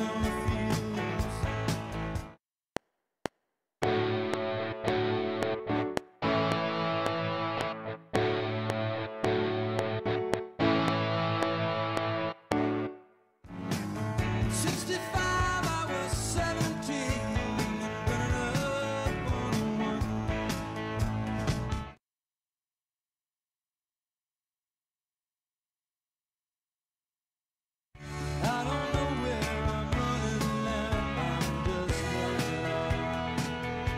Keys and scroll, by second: 2.1 space, 2.6 F7, 12.8 space, 21.7 ctrl+space, 28.0 space.